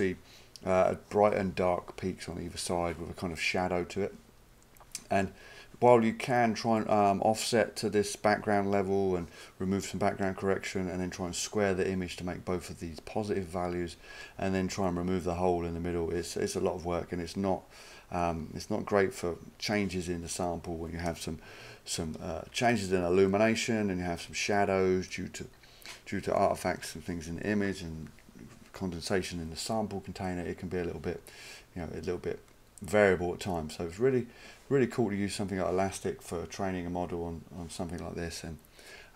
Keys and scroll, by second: 22.0-22.9 typing.